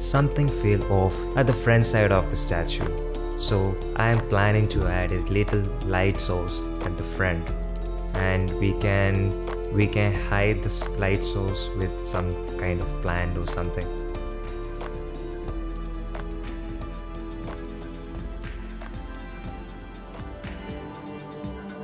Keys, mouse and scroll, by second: 0.0 shift+a, 4.2 middle click, 4.9 shift+middle click, 5.6 click, 6.4 KP_Decimal, 6.8-7.2 middle drag, 8.3 g, 12.8-15.5 drag, 14.3 KP_0, 16.7 middle click, 17.5-20.3 drag, 21.4 click.